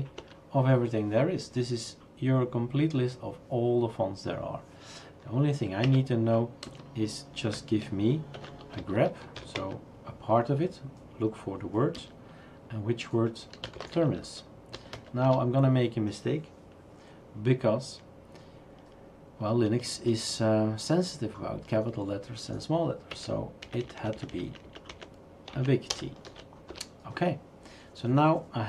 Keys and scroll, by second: 0.0-0.2 typing, 5.9 Up, 6.6 space, 8.3-10.1 typing, 12.0 space, 13.3-15.4 typing, 23.1 Up, 23.6 Left, 23.8 Left, 24.0 Left, 24.1 Left, 24.3 Left, 24.5 Left, 24.6 Left, 24.9 Left, 25.5 Right, 25.9-26.2 typing, 26.7 Return.